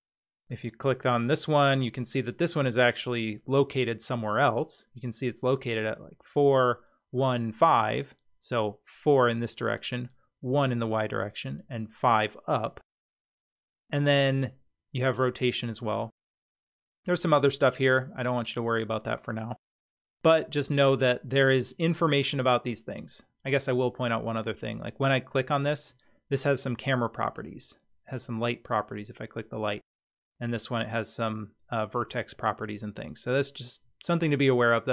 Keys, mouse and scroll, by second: 0.5 click, 19.5 click, 21.4 click, 25.3 click, 27.4 click, 29.8 click.